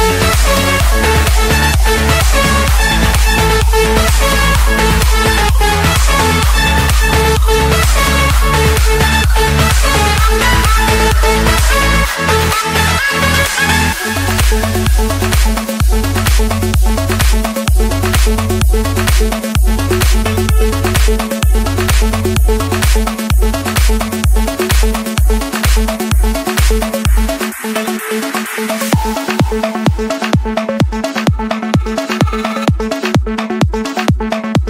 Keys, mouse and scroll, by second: 0.0 click, 5.1-5.7 typing, 6.6 Return, 7.6 Escape, 9.5-10.7 drag, 10.7-12.6 typing, 12.8 Return, 15.4 typing, 16.6 Return, 18.5 click, 19.8 click, 21.3 click, 21.5 scroll, 21.6 scroll down 5, 22.0-22.5 scroll up 8, 23.3 scroll, 24.2 click, 24.5 scroll, 24.7 Escape, 29.3-30.4 drag, 33.4-34.6 typing.